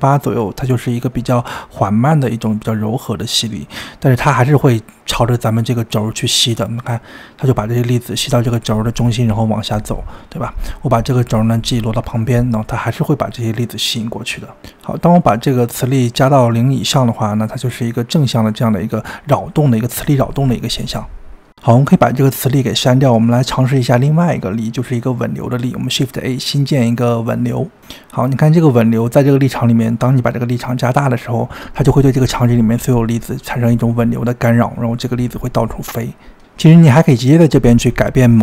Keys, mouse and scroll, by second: 0.4 click, 1.4 g, 11.0 g, 15.5-17.0 drag, 21.2 click, 21.3 g, 21.9-22.3 middle drag, 22.3 g, 23.0 middle click, 23.5 g, 23.7 x, 24.5 shift+a, 28.5 g, 31.1-34.1 drag, 37.3 click, 37.6-38.4 drag.